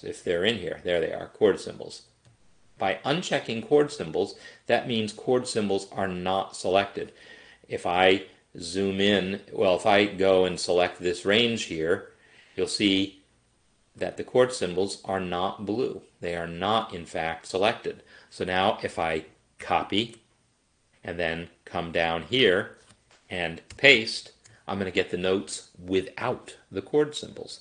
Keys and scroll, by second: 19.6 ctrl+c, 23.7 ctrl+v.